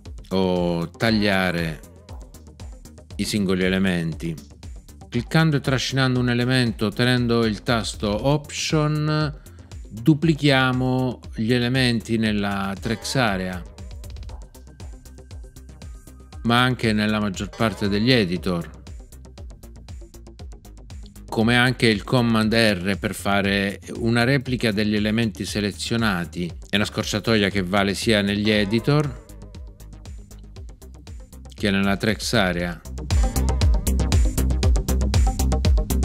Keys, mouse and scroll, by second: 0.9 super+x, 12.8 alt+click, 17.5 alt+click, 28.4 super+r, 33.1 super+r.